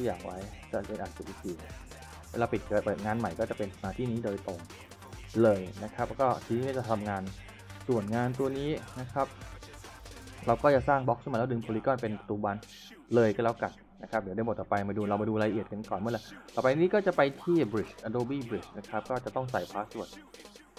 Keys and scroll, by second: 2.0 ctrl+shift+s, 3.6 w, 3.9 a, 5.0 w, 6.2-7.6 typing, 9.1 w, 11.8 s, 14.9-16.2 typing.